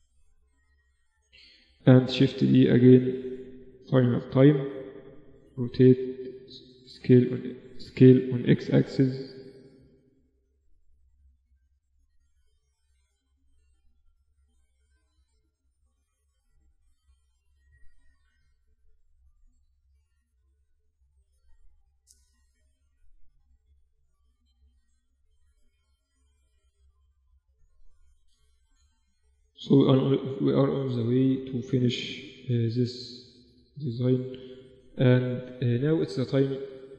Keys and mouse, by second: 0.0 g, 1.3 shift+d, 3.3-5.6 drag, 5.0 r, 5.9 s, 7.9 s, 10.2-13.3 drag, 12.5 r, 13.7 click, 14.5 z, 14.6 click, 15.4 middle click, 15.5 click, 16.7-20.5 drag, 18.6 right click, 20.5 middle click, 21.3-22.9 drag, 22.9 middle click, 23.1 click, 23.6-25.3 middle drag, 24.2 z, 26.2 Tab, 27.7 ctrl+r, 29.6 g, 31.0 a, 31.7 b, 34.0 g, 34.8 Tab, 35.3 z.